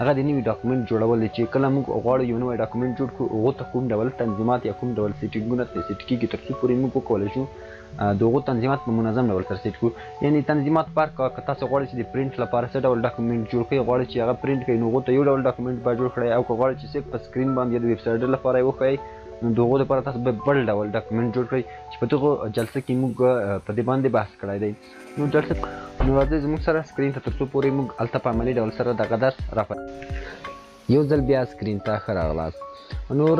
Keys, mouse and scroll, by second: 0.0 click, 1.0 click, 1.6 space, 2.9 space, 3.3 click, 3.8 click, 3.8 space, 5.0 click, 5.2 alt+click, 6.1 ctrl+z, 7.8 shift+click, 8.3 click, 8.3 scroll up 2, 8.6 click, 8.8 click, 9.3 click, 10.2 click, 11.3 scroll down 1, 11.4 ctrl+0, 11.5 scroll up 1, 11.7 ctrl+0, 11.8 click, 12.4 F9, 12.6 ctrl+n, 13.0 click, 13.1 ctrl+0, 13.3 click, 14.1 click, 15.2 ctrl+0, 16.6 click, 16.8 z, 18.9 click, 19.1 scroll down 1, 19.6 scroll up 1, 19.8 click, 20.1 ctrl+z, 21.0 click, 21.3 click, 21.5 scroll down 1, 22.2 ctrl+d, 22.4 scroll up 1, 22.7 click, 22.9 scroll down 1, 23.2 alt+click, 23.6 scroll, 24.2 scroll down 1, 24.2 scroll up 1, 24.4 ctrl+a, 25.0 Up, 25.2 click, 25.4 scroll down 1, 25.4 scroll up 1, 25.7 click, 26.5 click, 26.9 click, 28.6 click.